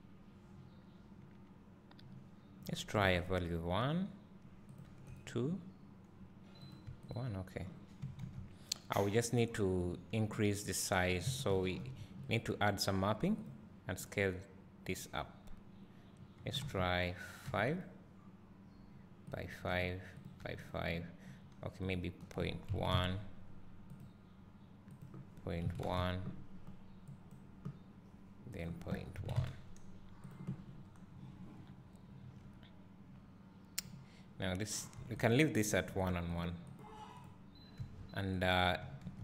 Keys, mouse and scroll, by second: 3.3 click, 9.8 click, 11.2 click, 11.8 ctrl+t, 15.4-18.7 drag, 20.5 click, 24.0 click, 27.2 click, 30.3 click, 32.5 `, 35.3 click, 36.1 click, 37.5 click.